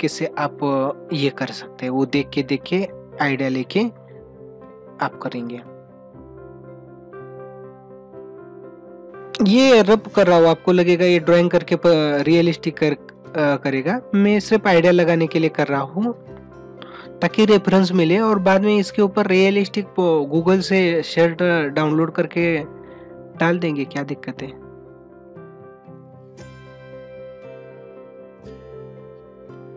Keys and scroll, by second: 2.0 ctrl+=, 8.8 ctrl+alt+z, 9.3 ctrl+alt+z, 16.1 ctrl+alt+z, 25.0 ctrl+alt+z, 26.6 ctrl+alt+z, 26.9 ctrl+-, 27.2 ctrl+-, 27.5 ctrl+alt+z, 29.6 ctrl+=.